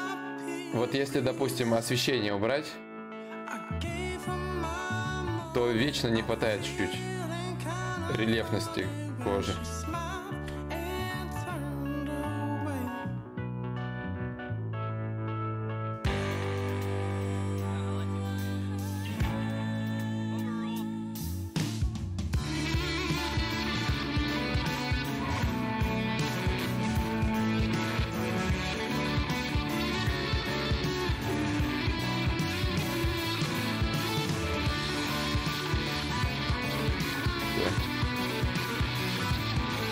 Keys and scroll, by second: 9.0 x, 10.0 ctrl+z, 10.0 y, 10.6 x, 12.1 ctrl+z.